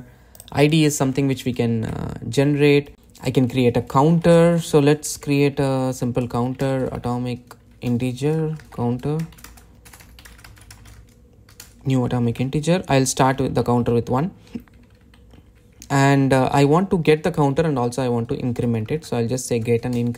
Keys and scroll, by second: 8.6 Return.